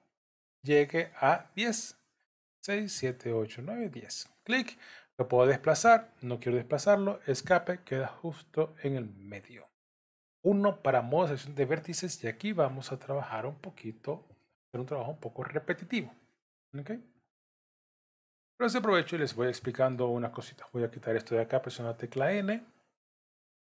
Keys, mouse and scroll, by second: 7.9 middle click, 10.4 1, 12.4 alt+a, 17.1 KP_3, 18.6 scroll up 1, 19.5 shift+middle click, 21.8 n, 22.5-22.8 scroll up 2.